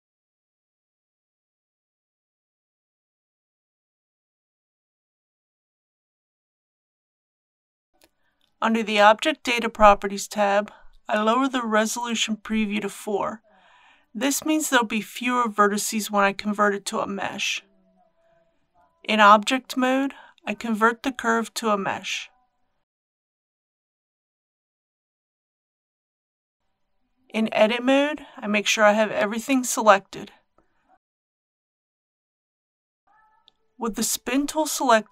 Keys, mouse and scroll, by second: 11.4 KP_4, 17.9 click, 19.0 Tab, 21.0 click, 22.1 Tab, 23.4 right click, 24.8 click, 27.7 Tab, 28.5 a, 29.9 scroll down 1, 32.2 KP_7, 33.0-35.1 scroll up 1.